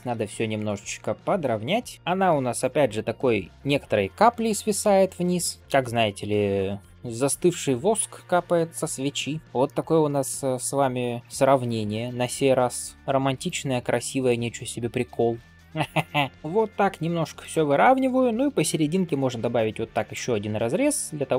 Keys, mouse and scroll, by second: 0.9 click, 1.4 middle click, 1.9 g, 8.0 scroll down 2, 8.6 scroll up 2, 9.1 scroll down 2, 9.4 click, 9.5 shift+middle click, 10.0 shift+click, 10.4 middle click, 11.2 click, 11.3 g, 12.2 click, 12.5 g, 13.3 click, 13.7 g, 14.5 click, 14.9 g, 15.8 click, 16.3 middle click, 17.6 middle click, 18.7 ctrl+r, 20.2 middle click.